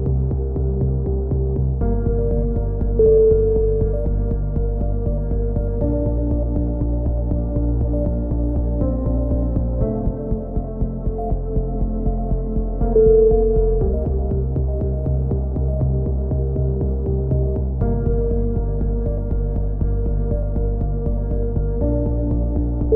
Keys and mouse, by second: 0.6 right click, 1.6 click, 2.2 click, 3.3 a, 3.5 Tab, 3.7 z, 3.8 click, 4.8 click, 6.7 click, 7.2 KP_7, 7.4 z, 7.6 click, 8.2 Tab, 8.8 right click, 8.8 e, 9.1 click, 9.7 KP_3, 13.0 KP_7, 13.8 right click, 13.8 e, 15.9 KP_3, 16.4-18.0 drag, 18.4-19.4 right drag, 18.6 e, 19.4 click, 20.7 click, 21.3 c, 21.6 right click, 21.8 click, 22.4 click, 22.4 KP_7.